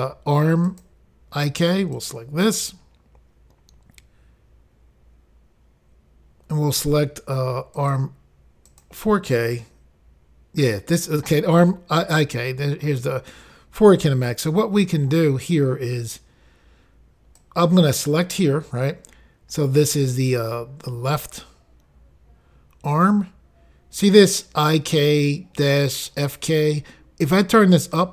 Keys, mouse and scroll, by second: 0.7 click, 0.8 click, 2.0 click, 2.1 click, 7.8 click, 8.0 click, 8.7 click, 8.8 click, 17.4 click.